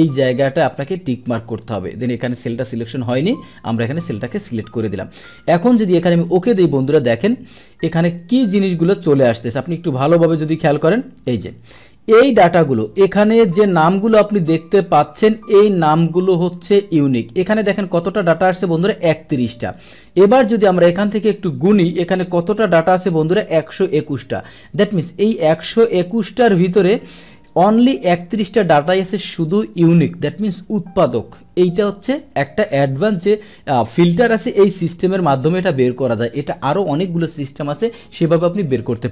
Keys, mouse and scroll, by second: 1.6 click, 2.7 Delete, 4.0 click, 6.1 click, 8.4-9.7 drag, 9.9 click, 10.8-12.7 scroll down 1, 12.7 click, 13.0 click, 15.2-17.4 drag, 19.7-20.1 drag, 20.3-21.5 scroll down 1, 21.5 click, 22.7 ctrl+shift+Down, 25.2 click, 26.7-27.4 drag, 28.2 click, 28.9-29.2 scroll down 1, 33.8 click, 35.7 click.